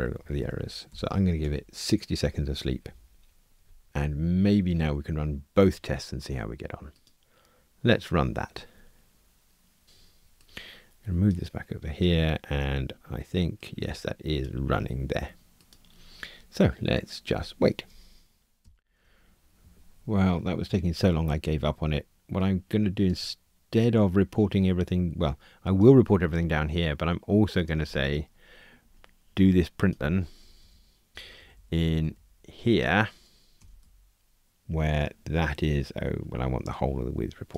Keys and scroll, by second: 2.0 Escape, 30.4 alt+Up, 31.1 super+c, 33.7 super+v.